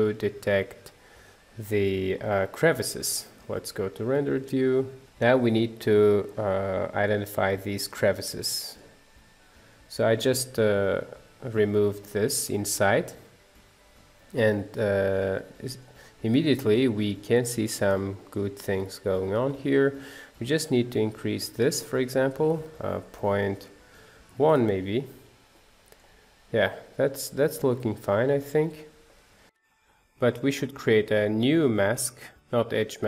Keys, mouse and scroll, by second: 0.0-2.1 drag, 2.1-4.5 middle drag, 4.5 z, 5.1-7.5 middle drag, 7.5-8.2 scroll up 1, 8.2 scroll down 2, 8.5-15.5 shift+middle drag, 15.5 scroll up 2, 15.8-19.2 middle drag, 19.2-19.5 scroll down 1, 19.5 middle click, 20.3-20.7 scroll up 1, 20.7-24.6 shift+middle drag, 24.6 click, 25.8 scroll down 1, 26.0-29.3 middle drag, 29.6-31.3 drag, 32.3-33.0 drag.